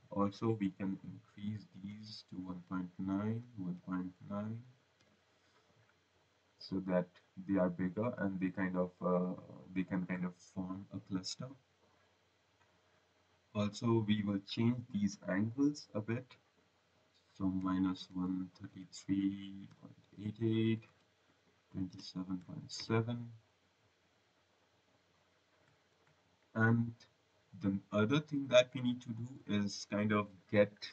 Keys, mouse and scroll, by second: 0.5 click, 1.7-4.1 typing, 6.5 click, 9.1 click, 9.5 click, 9.9 click, 15.4 click, 17.5-23.2 typing, 20.7 Tab, 24.0 click, 25.8 click, 26.3 right click.